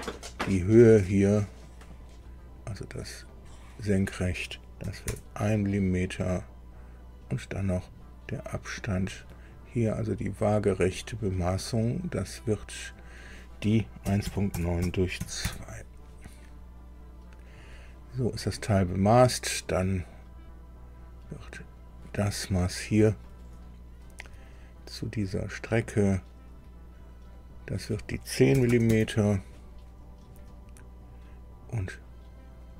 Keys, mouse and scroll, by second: 0.1 click, 1.8 click, 3.3 click, 4.8 KP_1, 5.1 KP_Enter, 7.6 click, 8.9 click, 10.7 click, 12.8 click, 14.0 KP_1, 14.2 KP_Decimal, 14.5 KP_9, 14.8 KP_Divide, 15.2 KP_2, 15.4 KP_Enter, 17.5 click, 20.4 scroll up 1, 21.8 click, 22.2 scroll down 1, 23.2-24.3 shift+middle drag, 25.7 click, 27.3 click, 28.5 KP_1, 28.7 KP_0, 28.9 KP_Enter, 30.1-30.7 scroll up 4, 31.2 scroll up 2, 32.6 click.